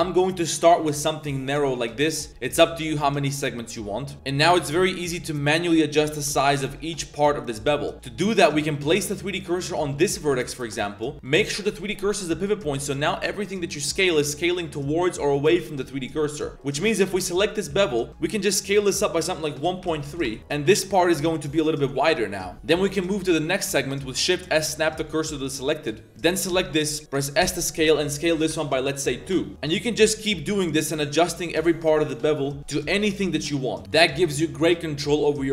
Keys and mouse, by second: 1.8 drag, 3.6 shift+click, 4.7 a, 5.0 a, 5.1 b, 6.2 KP_Decimal, 7.2 a, 7.4 a, 7.6 click, 8.0 click, 8.7 click, 8.8 middle click, 9.8 z, 9.9 middle drag, 10.3 shift+s, 10.6-11.0 drag, 11.1 z, 11.2-12.5 drag, 13.0 click, 13.4 ctrl+click, 13.9 s, 16.6 click, 17.0 ctrl+click, 17.2 z, 17.3 click, 17.7 z, 17.8 click, 18.1 s, 18.7 s, 20.5 drag, 21.0 z, 21.3 drag, 22.0-22.3 drag, 22.4 drag, 22.5 z, 23.0 click, 23.7 shift+s, 26.3 ctrl+click, 26.7 drag, 27.4 s, 29.5 shift+s, 31.3 click, 31.5 shift+s, 31.9 click, 32.1 ctrl+click, 32.4 s, 33.5 drag, 33.9 a, 34.0 shift+drag, 34.2-34.7 drag, 34.8 drag, 35.1 click, 35.4 shift+click.